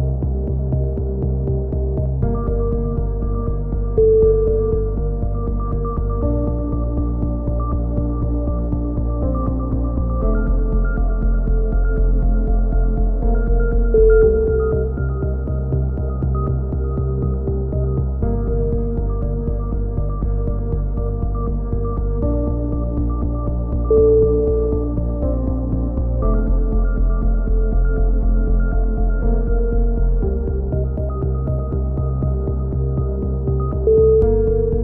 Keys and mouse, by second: 2.9-4.1 middle drag, 6.8 click, 10.2-11.5 right drag, 11.8 middle click, 12.6 click, 15.4-16.4 drag, 16.8 ctrl+z, 17.6 click, 18.2 middle click, 18.5 click, 19.3 a, 19.3 z, 19.4 middle click, 20.0 Tab, 20.0 right click, 21.1 Tab, 21.3 z, 21.6 z, 21.9 z, 22.2-23.5 drag, 23.5 right click, 25.2-27.4 middle drag, 25.5 a, 26.6 Tab, 27.4 z, 27.7 z, 27.9 Tab, 28.4 right click, 30.6-32.8 middle drag, 32.3 c, 33.8 click, 34.2 middle click.